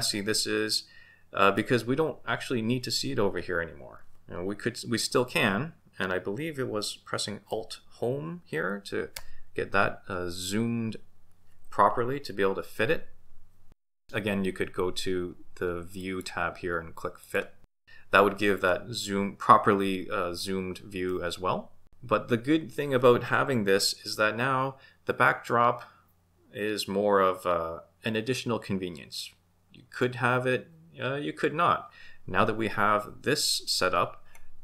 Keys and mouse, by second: 9.2 alt+Home, 16.1 click, 17.3 click.